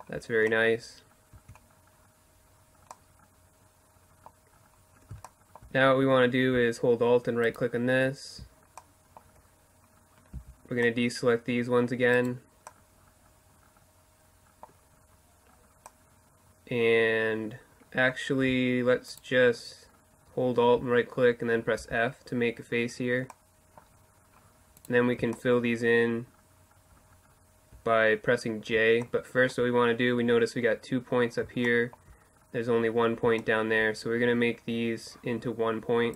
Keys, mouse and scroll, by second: 0.4 Tab, 4.3-6.5 middle drag, 6.5-8.3 right drag, 8.3-11.3 middle drag, 9.4 c, 11.3 right click, 15.6-16.7 middle drag, 18.1-19.9 right drag, 20.8 f, 21.7-23.8 middle drag, 23.8 right click, 24.3-27.4 middle drag, 28.1-35.2 middle drag, 35.2-36.1 right drag.